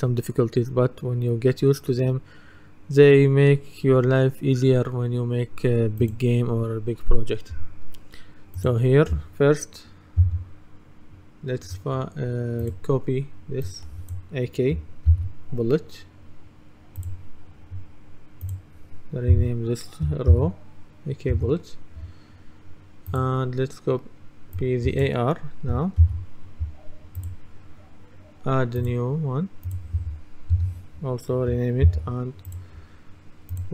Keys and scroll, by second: 10.2 F2, 15.1 ctrl+c, 19.4 F2, 20.4 ctrl+v, 21.4 Return, 26.0 ctrl+c, 30.6 F2, 31.9 ctrl+v.